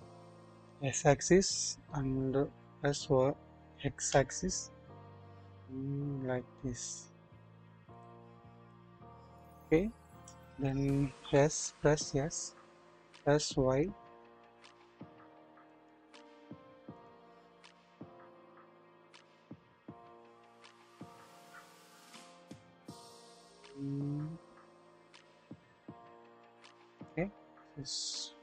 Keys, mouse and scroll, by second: 0.4 typing, 3.5-4.0 typing, 8.7-10.3 drag, 11.2 typing, 14.2 typing, 16.9 typing, 19.7 typing, 28.0-28.4 middle drag.